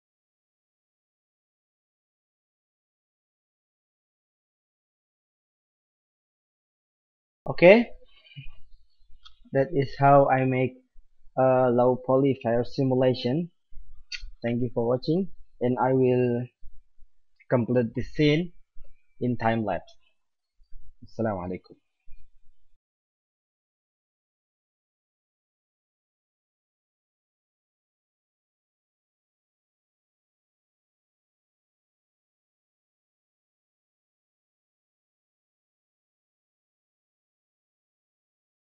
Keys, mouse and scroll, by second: 3.0 z, 3.1 z, 3.5 click, 4.3-5.8 drag, 5.6 right click, 6.1 click, 25.0-25.8 middle drag, 25.3 shift+a, 27.3-27.8 drag, 28.0 click, 28.9-29.5 middle drag, 29.5 alt+a, 31.2-31.7 drag, 32.3-33.5 drag, 36.8-37.3 drag.